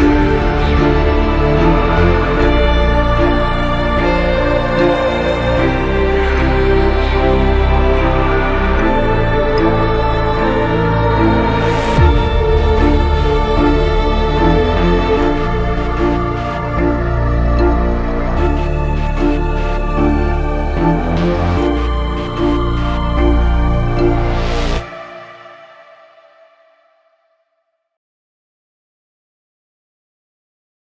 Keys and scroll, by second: 3.0 Delete, 6.0 F4, 24.4 shift+Page_Down, 26.3 shift+Page_Down.